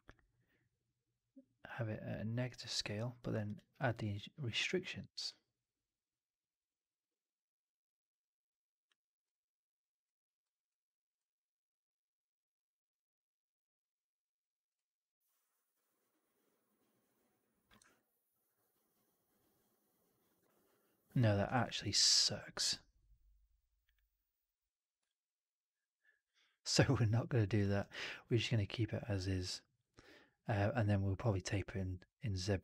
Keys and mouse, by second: 0.3-8.8 drag, 17.8-20.2 alt+drag, 21.4 alt+click, 21.7 alt+middle click, 21.9 alt+right click, 22.1 alt+click, 24.9-27.4 alt+drag, 27.7 alt+right drag, 27.9-32.6 alt+drag.